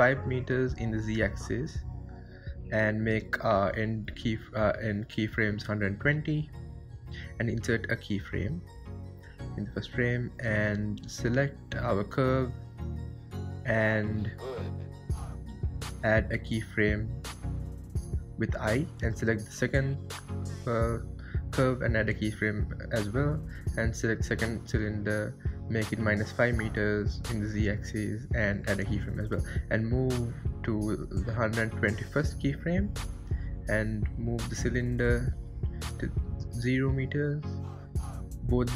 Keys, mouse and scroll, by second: 0.0-5.9 drag, 5.9-8.9 right drag, 9.4 click, 16.4 click, 18.8 click, 19.9-22.4 drag, 22.4-25.4 right drag, 25.6-28.6 drag, 29.4-34.1 drag, 34.1-35.8 right drag, 35.8 click, 36.7-37.9 drag, 37.9-38.7 right drag.